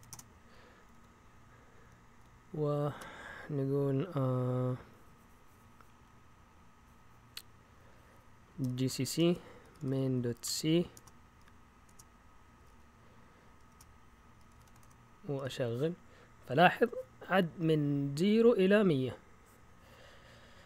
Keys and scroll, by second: 0.0-0.3 typing, 0.7 Up, 0.9 Up, 1.7 Up, 2.2 Down, 2.6-3.3 typing, 8.3-15.4 typing.